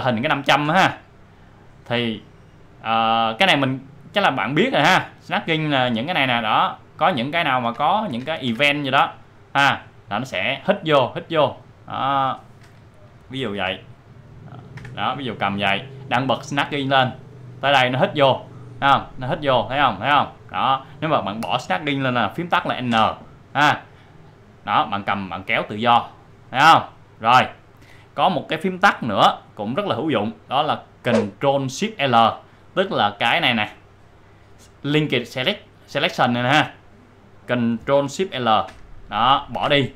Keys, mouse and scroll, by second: 2.9-9.2 drag, 9.4-12.3 drag, 14.5 click, 16.8-21.8 drag, 22.8 n, 24.3-27.7 drag, 38.6 ctrl+shift+l.